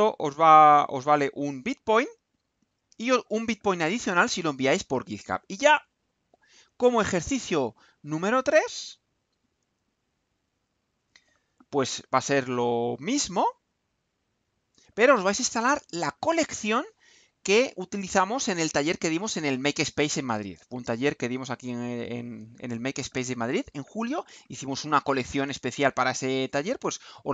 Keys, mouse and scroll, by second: 6.9 click, 10.4 click, 12.8-14.9 drag.